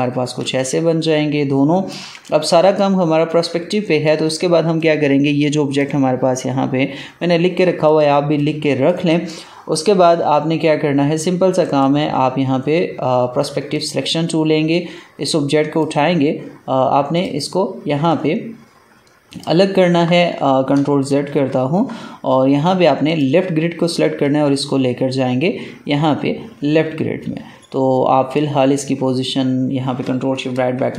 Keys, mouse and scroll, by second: 0.0 click, 0.3 ctrl+space, 0.4 click, 0.8 ctrl+space, 1.5 ctrl+space, 2.0 ctrl+space, 2.2 click, 2.6 space, 3.2 click, 3.5 space, 4.6-11.6 drag, 11.6 right click, 13.6-20.9 drag, 20.9 ctrl+z, 23.0-30.4 drag, 30.4 ctrl+shift+].